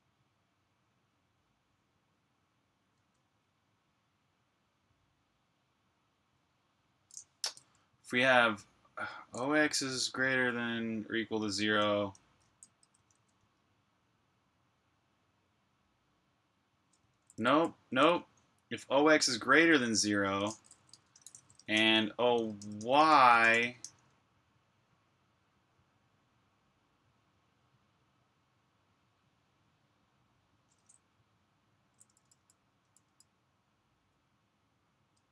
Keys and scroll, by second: 2.9 space, 12.1-13.3 typing, 17.1-17.4 typing, 19.4-24.2 typing, 31.8-33.0 typing.